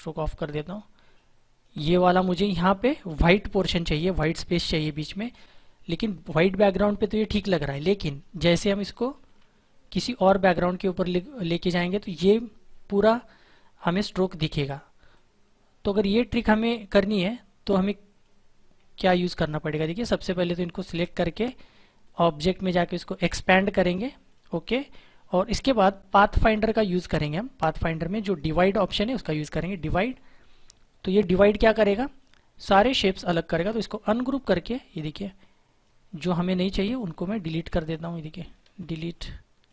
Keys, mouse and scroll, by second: 4.8 click, 7.2 click, 10.0 click, 11.4 click, 14.4 click, 18.9 ctrl+=, 19.5 click, 27.1 click, 29.7 click, 32.6 right click, 33.7 click.